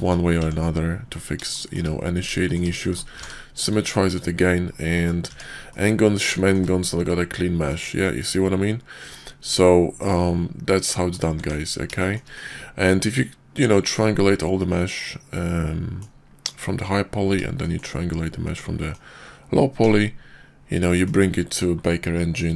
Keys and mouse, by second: 0.4 Tab, 1.5 shift+click, 1.6 shift+middle click, 2.4 shift+click, 2.5 shift+middle click, 3.1 alt+x, 4.1 click, 4.9 drag, 5.2 Tab, 5.6 click, 6.4 shift+middle click, 7.0-7.7 drag, 7.7 middle click, 8.5-9.0 middle drag, 10.8-11.1 middle drag, 11.3 Tab, 11.9 shift+middle drag, 12.3-16.0 middle drag, 17.5 shift+drag, 18.5-18.9 middle drag, 19.8 /, 20.9 middle click.